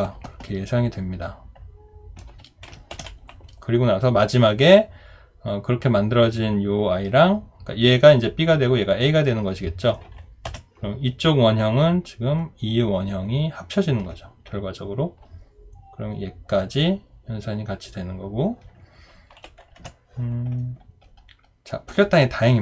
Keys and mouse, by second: 2.6 Delete, 2.9 ctrl+d.